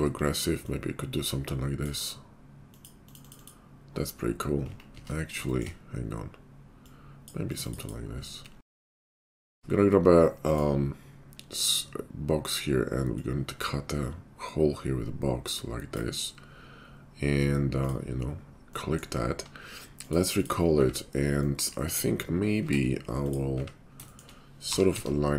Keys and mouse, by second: 5.0 ctrl+z, 9.4 d, 19.2 q, 20.5-23.3 middle drag, 20.7 `, 21.8 Tab, 22.6 Tab, 23.3 click, 23.3 middle click, 23.5 `, 24.0 shift+click, 24.3-25.3 middle drag, 24.6 g.